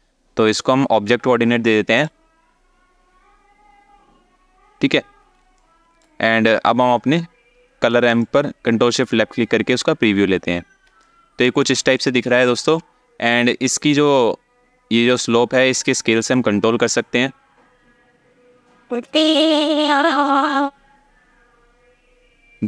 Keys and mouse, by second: 0.1 click, 5.4 alt+shift+middle click, 7.8 ctrl+shift+click, 10.7 alt+shift+middle click, 11.7 alt+shift+middle click, 16.0-22.6 drag.